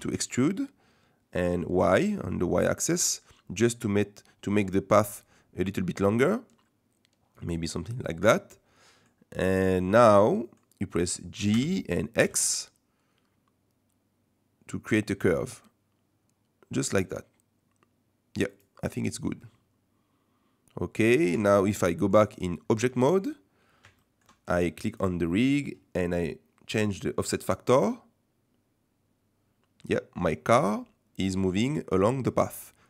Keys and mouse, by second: 8.6 middle click, 10.3 middle click, 11.5 g, 19.1 click, 19.5-21.2 middle drag, 21.4 Tab, 21.8-22.2 middle drag, 22.7 middle click, 24.0 shift+middle drag, 24.2 drag, 27.6-32.8 drag.